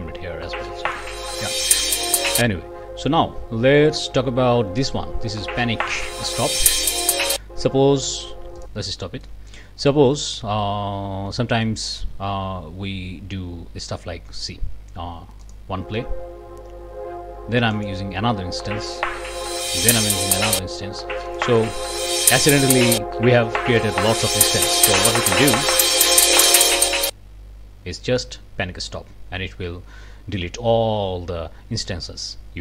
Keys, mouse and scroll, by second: 0.8 click, 8.6 click, 9.2 click, 15.5 click, 17.7 click, 19.9 click, 21.3 click, 26.6 click.